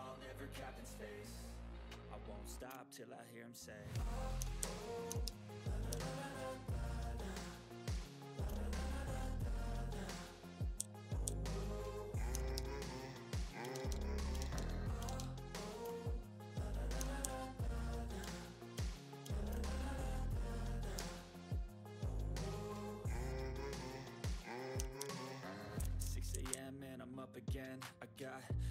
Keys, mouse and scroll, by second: 3.4-3.7 scroll down 1, 3.7 click, 4.1-5.8 typing, 4.9 click, 5.5 click, 6.1 click, 9.9 scroll down 1, 10.2 click, 10.7-13.0 typing, 11.0 click, 11.8 click, 12.7 click, 13.7 ctrl+z, 14.3 click, 14.3 ctrl+z, 14.7 click, 15.0 ctrl+z, 15.4 click, 15.9 shift+click, 16.7-17.7 typing, 17.7 click, 18.2 ctrl+scroll up 1, 18.5 ctrl+scroll down 1, 18.6 click, 20.9 4, 21.1 click, 22.4 click, 23.6 click, 24.5-27.0 typing, 26.7 click.